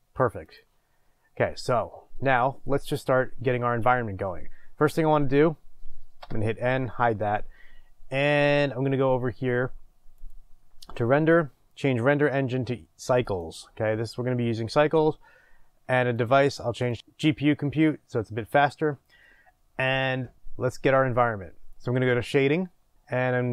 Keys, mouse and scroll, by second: 6.2 n, 13.4-23.5 drag.